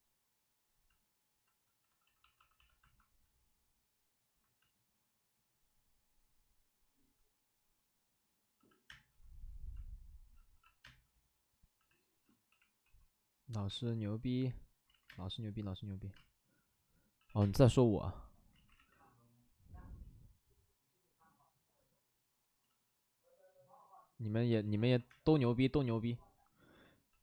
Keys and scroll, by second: 1.8 d, 2.0 d, 2.2 d, 2.3 d, 8.5 c, 8.8 space, 10.5 c, 11.7-13.6 typing, 14.8 ctrl+z, 15.0 space, 16.1 space, 17.1 c, 17.3 space, 18.5 ctrl+z, 18.7 x, 22.6 ctrl+z, 24.5 ctrl+z, 24.6 space, 25.1 space, 26.7 c, 27.0 c.